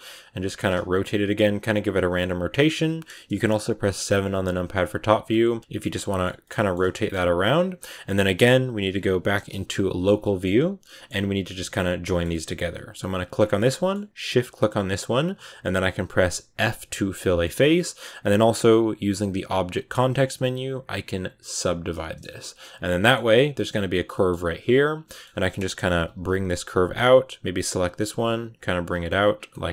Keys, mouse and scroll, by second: 0.0 scroll down 4, 0.6 r, 1.8-3.8 middle drag, 3.8 KP_7, 4.3-4.7 scroll up 2, 4.7 r, 5.4 r, 5.7 middle click, 6.6 shift+scroll up 4, 6.8 middle click, 7.0 g, 7.5 g, 10.1 middle click, 10.4 /, 10.7 middle click, 10.9 scroll up 2, 11.2 a, 11.5-13.2 shift+middle drag, 13.2 right click, 13.4-14.7 middle drag, 14.7 shift+right click, 16.5 f, 17.0 middle click, 17.6 scroll up 1, 21.5 w, 22.7-23.8 middle drag, 23.8 right click, 24.0 middle click, 24.2 g, 24.9 middle click, 25.8 KP_7, 26.5 g, 27.4 right click, 27.7 r, 28.1 g, 28.6 r, 28.8 g, 29.4 middle click.